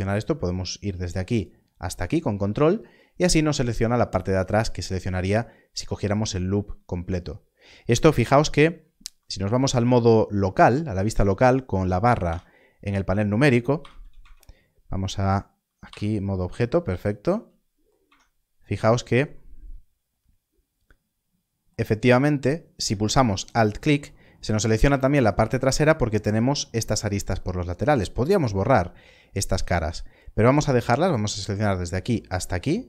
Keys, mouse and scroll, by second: 1.3 ctrl+click, 12.2 KP_Divide, 13.7 KP_Divide, 14.1 Tab, 15.9 KP_Divide, 18.0 KP_Divide, 22.8 Tab, 23.4 alt+click, 30.6 click, 32.0 ctrl+click.